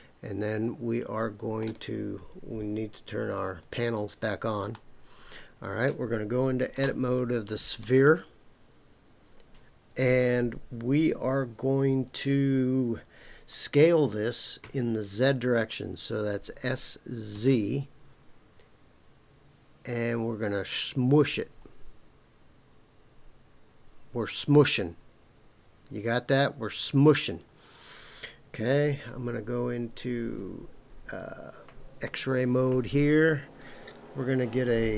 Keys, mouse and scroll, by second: 3.6 click, 4.7-5.9 middle drag, 6.8 Tab, 14.6 s, 17.3 z, 27.3 click, 31.1 click.